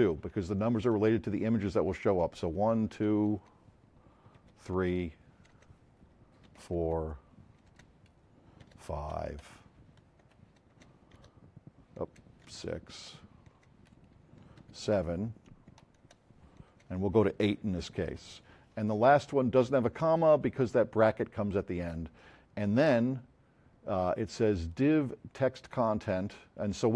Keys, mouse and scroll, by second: 0.4 Right, 0.9 Left, 1.7 Right, 2.0 Left, 2.4 Down, 3.4 BackSpace, 4.4 3, 4.8 Down, 5.5 BackSpace, 6.5 4, 6.7 Down, 7.7 BackSpace, 8.6 5, 9.0 Down, 9.4 Left, 10.2 Right, 10.7-13.5 typing, 13.1 Down, 14.6 7, 15.0 Right, 15.8 Down, 16.1 Left, 16.2 Down, 16.7 BackSpace, 17.8 8.